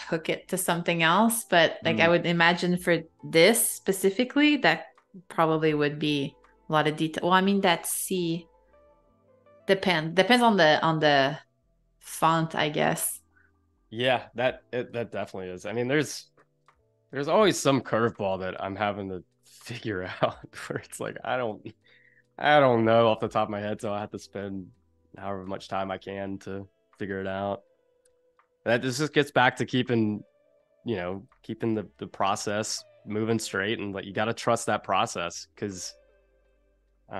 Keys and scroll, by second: 0.0 space, 3.4 space, 7.2 i, 8.3 a, 28.0 i, 36.7 super+z.